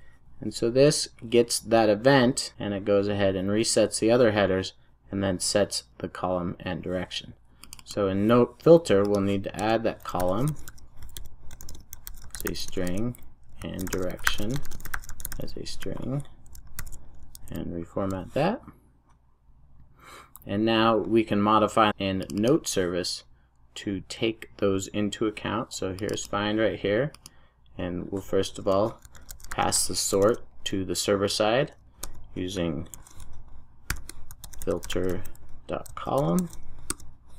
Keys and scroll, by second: 16.7 alt+super+l, 17.6 super+s, 36.8 Return.